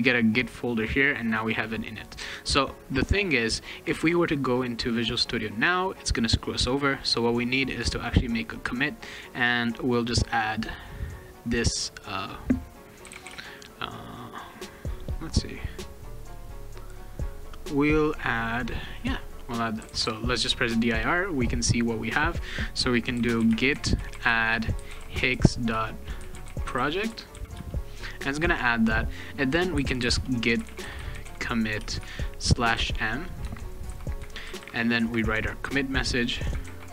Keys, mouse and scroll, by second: 11.3 middle click, 12.7-13.7 typing, 16.2 click, 18.4 click, 19.0-20.5 typing, 22.9-27.8 typing, 29.5-34.6 typing, 36.4-36.9 typing.